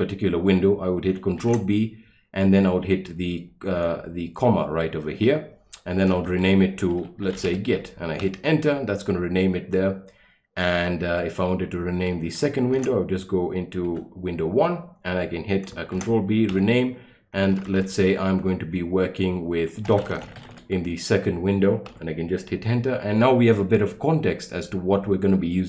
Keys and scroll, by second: 1.4 ctrl+b, 3.7 ,, 6.1-7.9 typing, 8.2 Return, 12.7 ctrl+b, 13.9 1, 15.9 ctrl+b, 16.5 ,, 17.5 BackSpace, 17.6 BackSpace, 17.8 BackSpace, 19.6-21.0 typing, 21.9 Return.